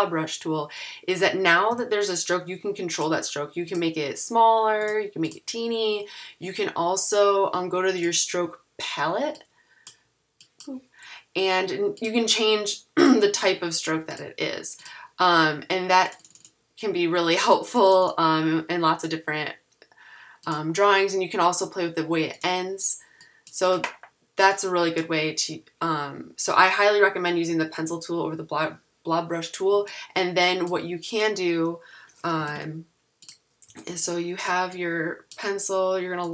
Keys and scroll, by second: 1.7 v, 32.2-34.3 typing.